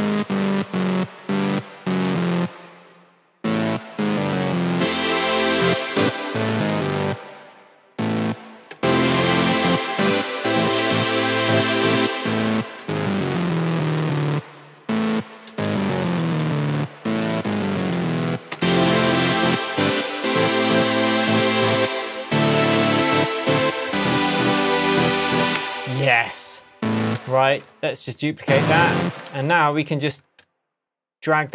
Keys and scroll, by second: 3.9 Down, 6.0 space, 8.7 space, 12.0 space, 15.4 Down, 25.5 space, 27.1 BackSpace, 29.3 super+d, 29.7 shift+super+Tab, 30.5 shift+Tab.